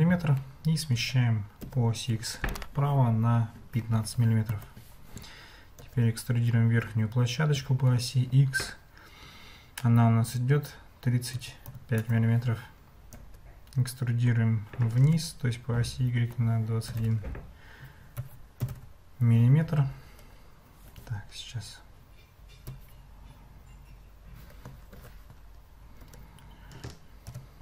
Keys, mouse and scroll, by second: 0.9 g, 5.8 e, 13.1 e, 24.9 ctrl+z, 26.0 e.